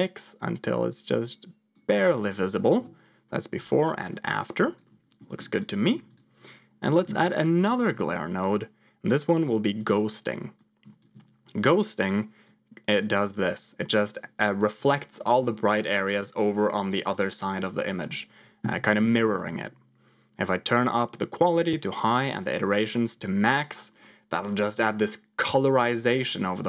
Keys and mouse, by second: 2.7 m, 3.6 m, 4.0 click, 5.1 middle click, 5.5 click, 5.7 shift+a, 9.0 click, 10.6 ctrl+click, 12.1 click, 13.3 click, 20.8 click, 22.0 click.